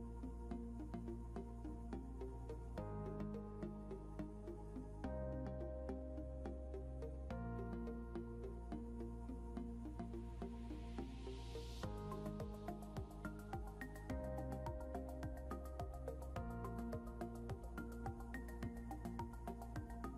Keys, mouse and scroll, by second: 0.6 shift+h, 2.1 shift+v, 3.3-5.7 typing, 9.1 n, 9.4 Return, 12.8-15.8 typing, 17.4 shift+o, 19.3-20.1 typing.